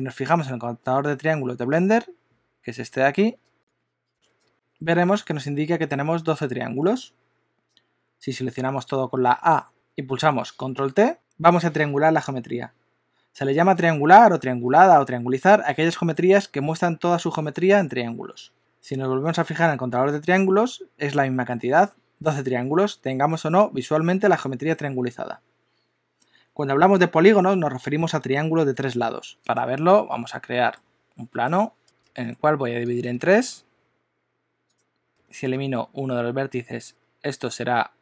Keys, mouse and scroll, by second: 9.3 a, 11.1 super+t, 29.3 Tab, 29.4 click, 29.9 KP_1, 30.6 shift+middle click, 31.5 shift+right click, 31.8 shift+middle click, 32.1 shift+d, 33.3 shift+d, 35.1 click, 35.5 ctrl+x.